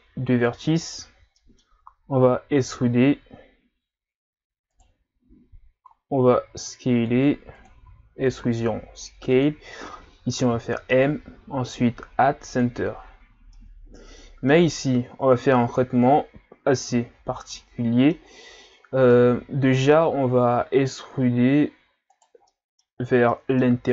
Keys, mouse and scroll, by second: 0.8 alt+right click, 1.4 middle click, 1.8-2.6 scroll up 1, 2.0 middle click, 2.6 e, 6.4 s, 7.9 e, 8.6 s, 10.5 m, 13.1-13.5 scroll down 6, 13.5-14.8 middle drag, 14.8-15.6 scroll up 2, 15.6-16.2 scroll down 2, 16.2-16.9 scroll up 1, 16.9 Tab, 17.5-18.6 middle drag, 18.6 Tab, 19.1-20.1 middle drag, 20.1-22.0 scroll up 1, 22.0 scroll up 1, 22.1 alt+right click, 22.5 middle click, 23.0 scroll up 1, 23.3 middle click.